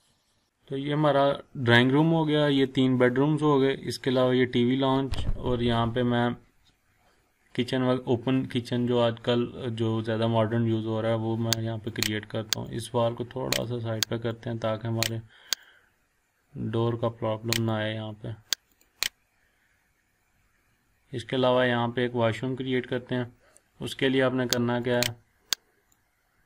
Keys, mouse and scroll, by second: 0.2 scroll up 1, 2.1 scroll down 1, 4.3 scroll up 1, 8.3-9.3 scroll down 1, 10.2-10.6 scroll up 1, 11.9-13.9 drag, 19.1-19.5 scroll down 1, 19.8 scroll up 1, 20.9 scroll down 1, 21.4 scroll up 1, 24.8-26.4 drag.